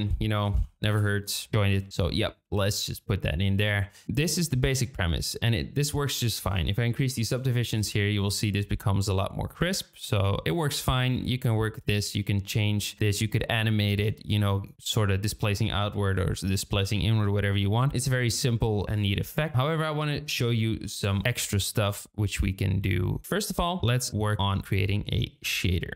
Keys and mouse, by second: 1.6-2.1 drag, 3.6 click, 6.3-8.1 drag, 7.2 KP_0, 7.4 KP_0, 12.9-13.9 drag, 19.1-21.3 drag, 23.2 n, 23.8 click.